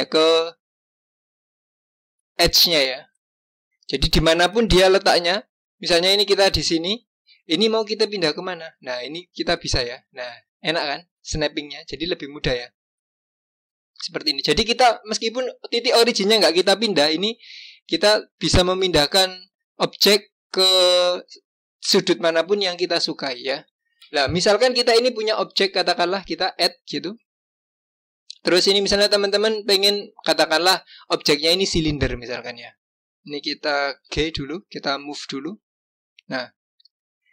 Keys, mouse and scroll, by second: 7.4-8.3 scroll down 1, 8.3-10.5 scroll down 1, 22.3 click, 26.1-29.2 drag, 34.0 g.